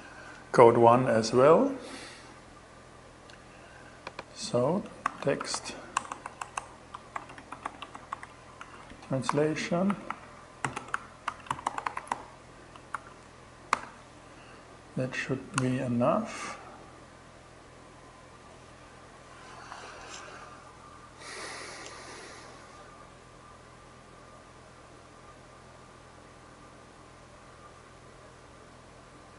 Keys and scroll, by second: 4.3-8.1 typing, 8.7 alt+5, 9.3 alt+Right, 9.8-12.9 typing, 13.2 alt+shift+6.